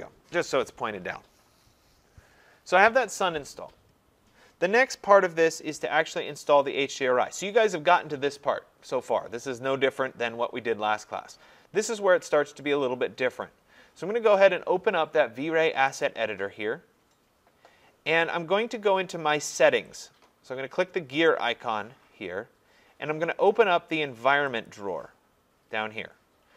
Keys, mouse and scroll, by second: 16.0 click, 20.1 click, 24.7 click.